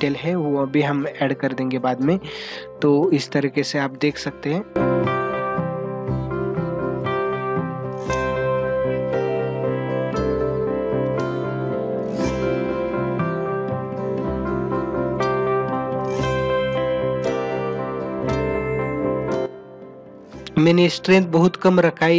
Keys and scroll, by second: 2.5 space, 8.6 space, 10.8 ctrl+=, 13.0 space.